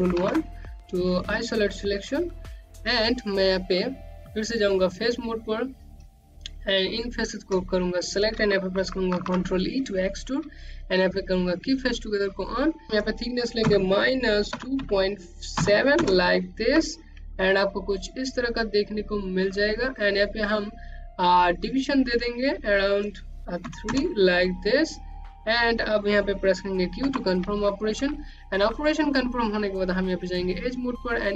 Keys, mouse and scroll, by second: 1.4 right click, 4.2 click, 4.7 shift+click, 5.2 shift+click, 5.6 shift+click, 7.5 ctrl+e, 10.0 click, 12.9 KP_2, 13.1 KP_Decimal, 13.9 KP_7, 14.3 KP_Enter, 15.5 scroll down 1, 15.8 alt+click, 20.3 click, 22.0 KP_3, 22.2 KP_Enter, 26.0 q, 27.3 click, 29.1 q, 29.6-30.2 scroll up 2, 30.2 click, 31.1 right click.